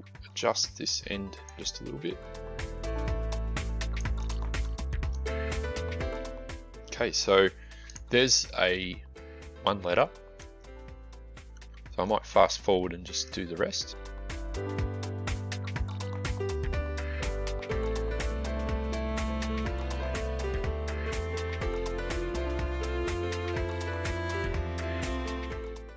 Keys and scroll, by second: 15.3 Delete, 16.3 Delete, 21.2-22.1 typing, 22.5 Delete.